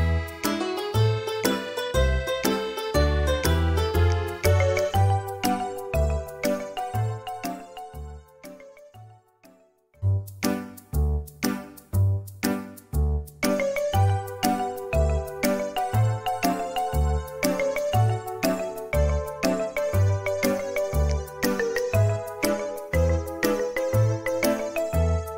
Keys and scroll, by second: 0.4 ;, 2.7 space, 5.8 space, 7.6 m, 13.2 space, 14.9 m.